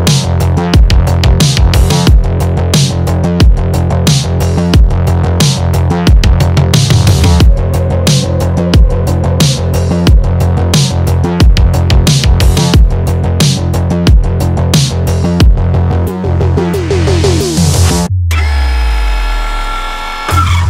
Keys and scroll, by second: 8.9 Return.